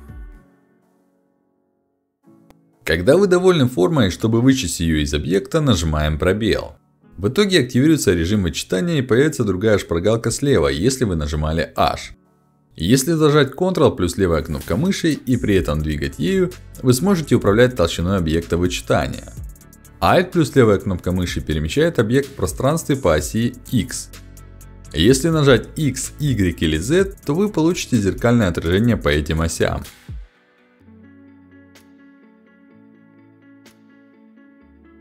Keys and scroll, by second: 5.7 space, 25.8 z, 30.3 z, 31.0 x.